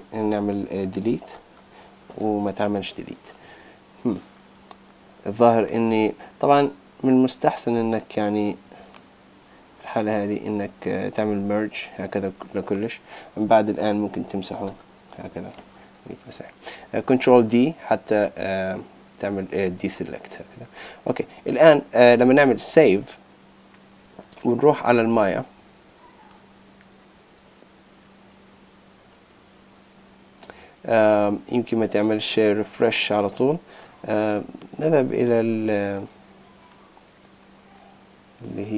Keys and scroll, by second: 17.0 super+d, 22.7 super+s, 24.2 super+Tab.